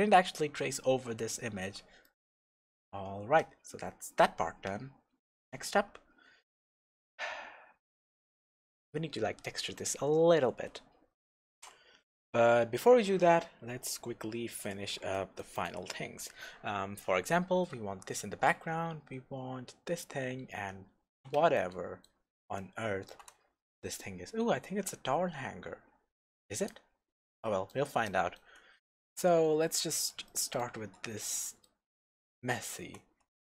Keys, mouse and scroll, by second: 0.5-1.9 scroll down 1, 2.0-11.6 shift+middle drag, 3.6-3.9 scroll up 1, 3.9 scroll down 1, 11.6 click, 13.4-15.1 scroll up 1, 15.1-33.4 middle drag, 15.8-17.1 scroll down 2, 17.1-19.9 scroll down 1, 20.9-21.6 scroll up 2, 26.7-27.2 scroll down 1, 29.0-29.3 scroll up 1, 29.3-30.3 scroll down 1, 30.9-31.3 scroll up 1.